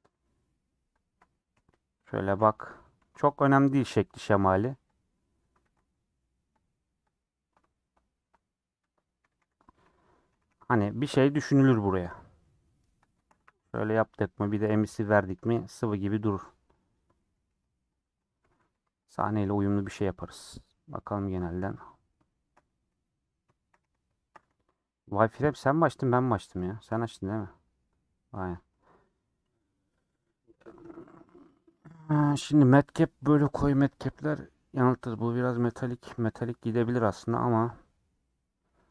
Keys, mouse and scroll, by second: 1.5 KP_1, 1.9 KP_3, 2.3 scroll up 3, 3.0 ctrl+r, 3.9 g, 4.8 click, 5.6 ctrl+r, 7.0-8.2 drag, 8.2 KP_7, 9.3 s, 12.0 KP_1, 12.4 KP_3, 13.3 1, 14.0 alt+z, 14.5 alt+z, 14.7 click, 15.2 g, 16.7 click, 17.2 g, 18.1 click, 18.4 g, 19.1 Tab, 19.3 scroll down 6, 19.5 middle click, 19.8 alt+z, 20.0 scroll down 2, 20.1 middle click, 20.6-21.0 scroll down 6, 21.0 middle click, 21.6 click, 21.9 scroll up 1, 21.9 scroll down 1, 22.2 shift+middle click, 22.7 z, 23.8 alt+z, 24.0 shift+middle click, 24.4 alt+z, 25.1-26.7 drag, 26.7 shift+middle click, 26.9 scroll down 2, 27.0-28.0 middle drag, 28.0 click, 28.4 scroll down 1, 28.6 middle click, 28.7 scroll up 4, 29.0 scroll down 1, 29.3 middle click, 29.9-30.2 scroll up 3, 31.5-38.9 drag.